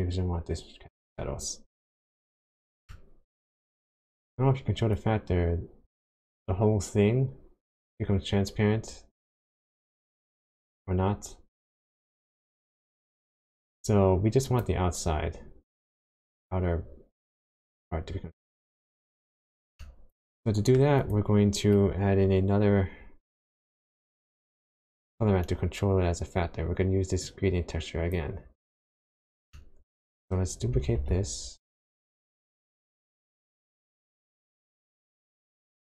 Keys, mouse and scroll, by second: 2.3 middle click, 3.5-4.3 scroll up 5, 4.9 click, 18.7 click, 19.1-19.8 scroll down 4, 19.8 middle click, 21.0 click, 23.5 click, 24.0 middle click, 27.2 click, 28.6 click, 29.1-29.4 scroll down 2, 29.5 middle click, 30.0-30.7 scroll up 2, 31.0 shift+d, 34.2 click, 34.4 middle click.